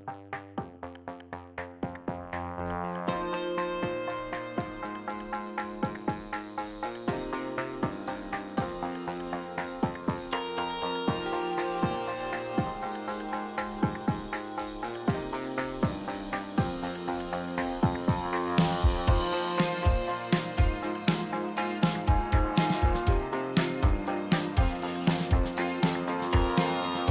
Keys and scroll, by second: 0.2 space, 1.0 space, 2.1 space, 4.1 space, 4.7 space, 6.3 space, 9.0 space, 9.6 KP_5, 10.3 space, 11.9 space, 12.8 KP_1, 12.8 KP_2, 12.9 Return, 12.9 space, 20.1 n, 20.7 q, 21.3 n, 25.0 n.